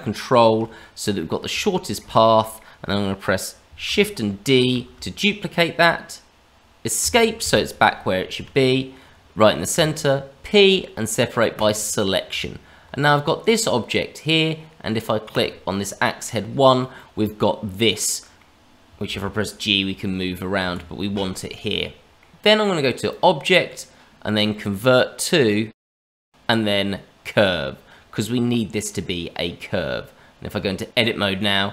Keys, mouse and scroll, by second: 0.1 ctrl+click, 0.8 scroll down 1, 1.1 middle click, 1.5 shift+middle click, 2.1 middle click, 4.8 shift+d, 9.7 p, 12.3 Tab, 13.4 click, 15.2 click, 16.3-16.9 scroll down 1, 16.9 middle click, 19.0 g, 21.5 middle click, 23.0 click, 28.8 middle click, 29.8 Tab, 31.1 middle click.